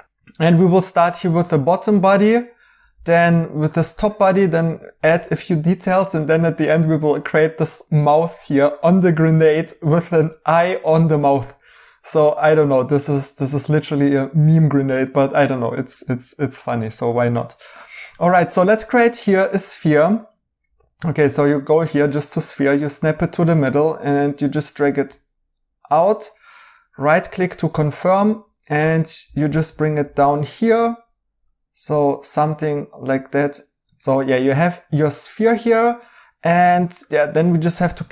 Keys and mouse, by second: 5.9 right click, 8.7 right click, 11.4 right click, 14.8 right click, 20.1 Escape, 26.9 right click, 28.1 g, 33.8 Escape, 33.9 right click, 37.9 a.